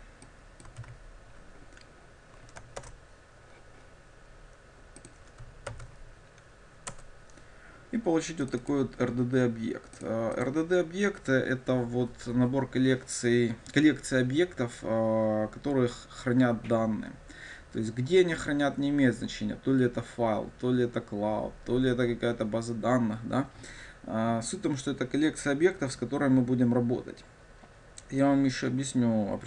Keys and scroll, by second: 0.9 ctrl+v, 2.9 ctrl+shift+super+Return, 5.9 ctrl+alt+super+v.